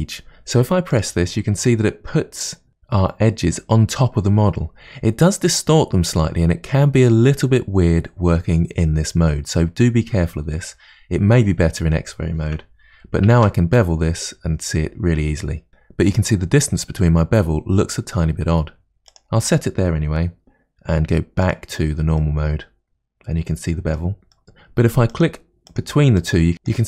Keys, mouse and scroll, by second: 1.0 click, 13.4 ctrl+b, 21.5 click, 22.3-24.4 middle drag, 25.3 click, 26.3 click, 26.6 click.